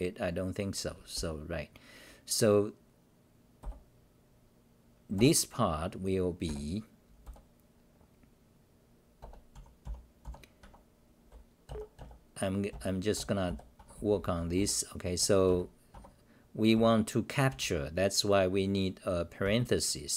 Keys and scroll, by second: 3.6 g, 5.1 p, 6.4 f, 7.2 p, 10.2 u, 12.7 BackSpace, 13.8 Home, 14.0 h, 14.6 u, 15.9 Home, 16.7 f, 17.5 u, 19.4 Delete.